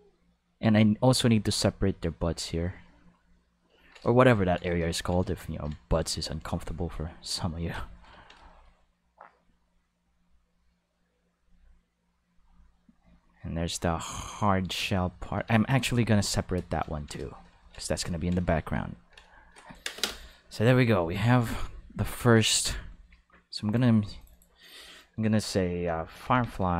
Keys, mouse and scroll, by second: 0.4 click, 2.1-3.7 drag, 6.2-7.6 drag, 9.5-11.4 drag, 12.4-14.3 drag, 15.5 ctrl+z, 15.9 ctrl+z, 22.6 shift+middle click, 23.7 click, 24.2 click, 24.3 click, 26.2 f, 26.5 e.